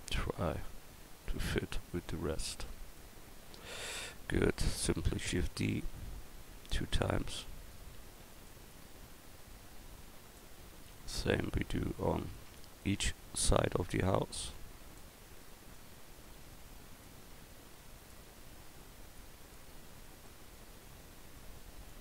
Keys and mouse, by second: 0.7-3.6 drag, 5.1 shift+d, 8.3 shift+d, 13.8-14.6 right drag, 14.6-16.4 middle drag, 17.0-18.1 middle drag, 18.1-20.3 drag, 20.3-22.0 middle drag.